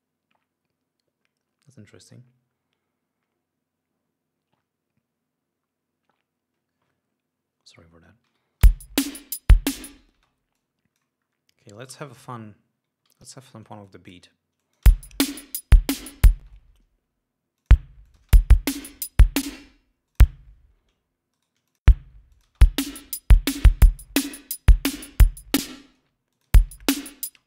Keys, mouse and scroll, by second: 8.6 Home, 9.0 space, 9.9 ctrl+scroll down 2, 10.5 ctrl+space, 10.9-11.5 ctrl+drag, 11.6 scroll up 2, 12.2 alt+d, 12.3 alt+scroll up 2, 13.4 alt+d, 14.2-14.6 drag, 14.9 click, 15.2 space, 15.5-15.9 ctrl+scroll up 4, 16.4 ctrl+scroll up 2, 16.8 ctrl+space, 16.9 ctrl+d, 17.9 click, 18.4 click, 18.5 space, 19.8 space, 20.4 click, 21.7 shift+right click, 22.0 shift+click, 22.6 click, 22.8 space, 24.2 ctrl+scroll down 2, 24.6 ctrl+scroll up 2, 25.9 space, 26.6 ctrl+click, 26.8 ctrl+space, 27.1 ctrl+scroll up 2.